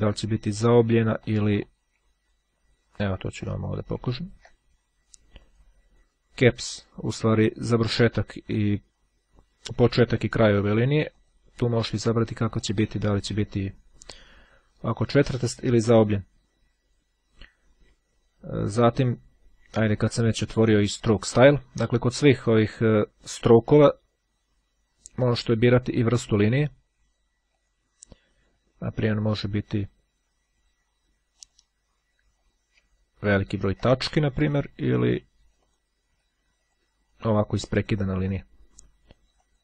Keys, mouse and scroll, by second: 0.6-1.2 ctrl+scroll down 2, 1.4 click, 2.4-3.2 ctrl+scroll up 2, 3.7 ctrl+scroll up 2, 4.2-4.8 ctrl+scroll down 2, 5.6 click, 11.2 click, 12.7 click, 15.2 click, 18.2-18.8 ctrl+scroll down 2, 26.6-28.1 drag, 31.5 click, 32.4-33.5 scroll down 3, 33.8-34.4 ctrl+shift+scroll down 2, 34.4-35.1 shift+scroll down 1, 35.5 click, 36.5 click, 37.8-38.4 shift+scroll down 2, 38.4 shift+scroll down 1, 39.4-39.6 drag.